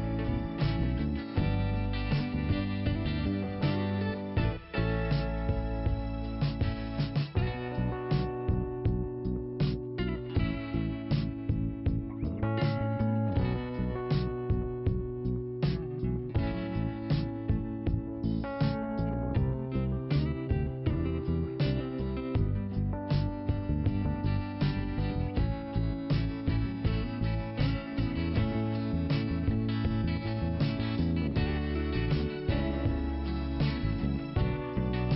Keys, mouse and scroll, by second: 0.2 middle click, 1.5 click, 1.6 click, 2.4 click, 4.4 click, 4.5 click, 5.0 click, 6.6 click, 7.0 click, 8.3-8.6 scroll down 1, 12.2 click, 13.3 click, 15.2 middle click, 15.4 middle click, 16.1 middle click, 19.9 click, 20.0 click, 20.8 click, 22.8 ;, 24.7 click, 25.3 click, 25.4 click, 26.0 click, 26.1 click, 26.3 Return, 26.9 click, 27.0 click, 27.6 click, 29.0 click, 29.1 click, 31.1 middle click.